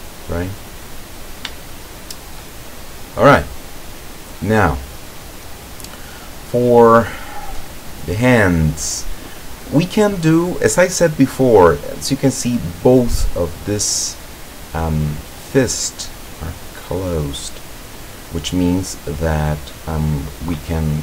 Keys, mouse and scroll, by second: 1.7 shift+click, 3.6 click, 4.3 click, 7.4 click, 8.1-9.2 drag, 9.5-10.8 drag, 11.5 click, 12.7 click, 13.5 scroll up 1, 14.3 scroll down 1.